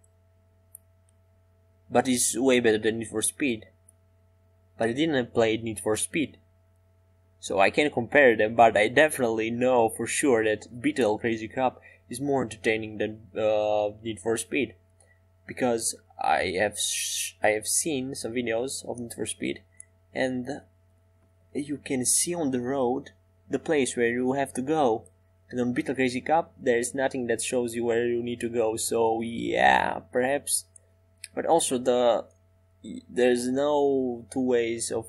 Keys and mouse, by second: 16.2 Tab, 17.0-18.8 drag, 20.1-22.7 drag, 25.6 Tab.